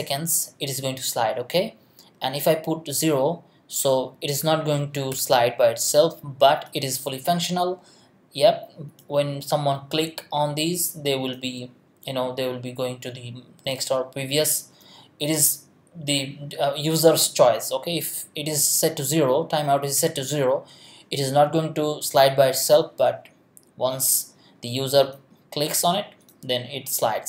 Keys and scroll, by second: 5.1 BackSpace.